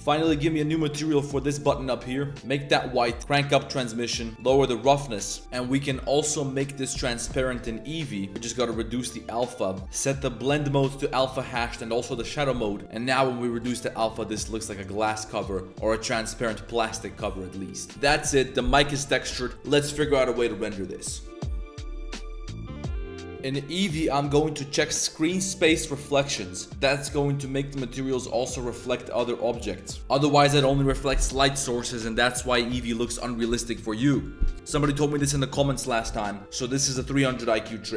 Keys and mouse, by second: 0.9 middle drag, 1.3 g, 3.2 click, 4.5 click, 6.1 middle click, 6.5 middle click, 8.6-9.8 drag, 12.8 click, 13.8-14.3 drag, 14.5-15.2 drag, 15.3-15.6 drag, 15.7 drag, 16.2 click, 16.5 drag, 16.9-17.3 drag, 17.6 drag, 18.2 click, 18.8 click, 25.1 click, 26.5 click, 26.7 a, 27.0 click, 27.9 click, 28.5 click, 28.9 click, 29.1 click, 29.6-30.0 drag, 31.8 drag.